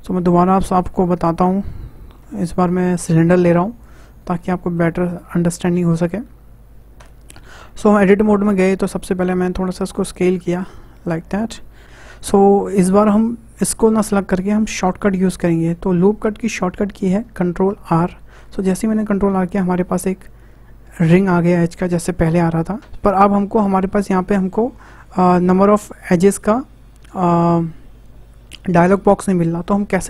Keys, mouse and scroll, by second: 2.4 shift+a, 4.5-7.0 middle drag, 7.0 Tab, 9.5 click, 11.3-11.8 scroll down 1, 18.3 ctrl+r.